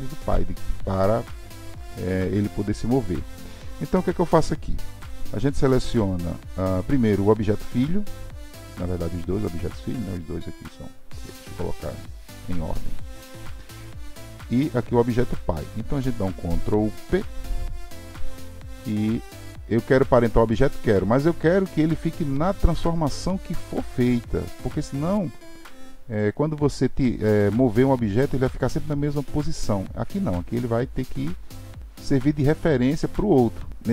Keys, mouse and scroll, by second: 4.9 drag, 6.7-12.9 drag, 14.0 shift+click, 17.1 ctrl+p.